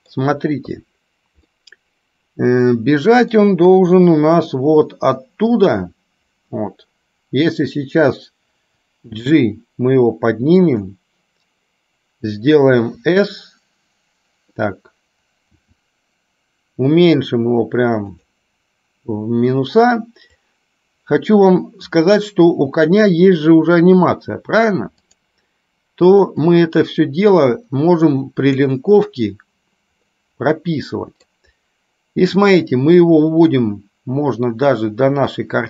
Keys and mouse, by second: 21.4 click, 25.2 click, 26.6-29.0 drag, 30.2-31.6 middle drag, 32.6-35.6 drag.